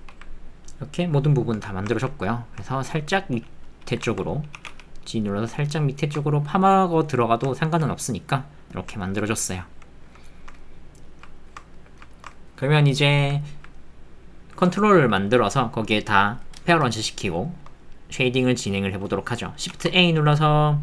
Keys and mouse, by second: 1.6 Tab, 1.9 ctrl+middle click, 2.3 middle click, 2.7 ctrl+middle click, 3.1 middle click, 3.7 middle click, 4.1 ctrl+middle click, 4.5 g, 6.5 middle click, 7.6 ctrl+middle click, 7.9 middle click, 8.3 click, 9.0 ctrl+middle click, 9.3 click, 10.2 shift+middle click, 10.6 ctrl+middle click, 11.4 ctrl+shift+middle click, 11.7 ctrl+middle click, 12.1 shift+middle click, 13.4 ctrl+middle click, 13.7 middle click, 14.8 ctrl+middle click, 17.4 shift+middle click, 17.8-18.8 middle drag, 19.7 shift+a.